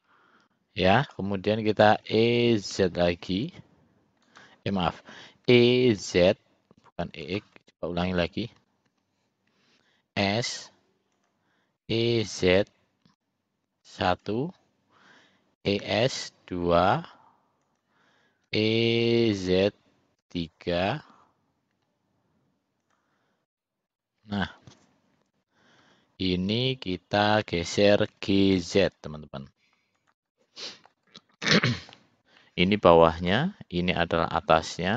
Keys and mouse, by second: 0.0-1.3 middle drag, 2.1 e, 5.6 e, 8.1 ctrl+z, 8.6 ctrl+z, 9.0 ctrl+z, 10.2 s, 11.9 e, 15.8 e, 18.6 e, 23.6 middle click, 25.9 l, 28.2 g, 30.4 middle click, 31.5 middle click, 32.5 middle click, 33.3 middle click, 34.8-34.9 middle drag.